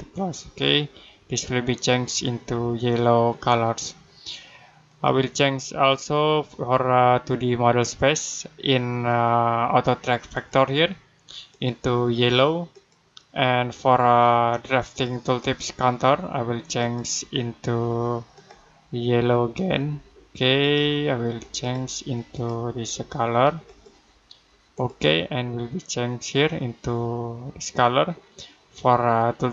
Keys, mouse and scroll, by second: 4.7 click, 10.2 click, 15.3 click.